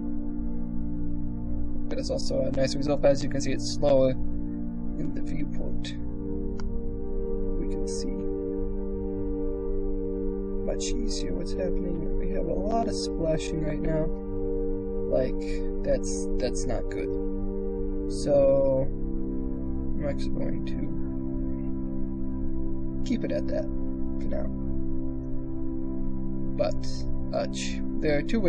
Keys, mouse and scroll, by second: 6.7-11.2 middle drag, 11.2-13.5 drag, 14.9 click, 14.9 shift+space, 15.6-16.8 drag, 17.2 KP_0.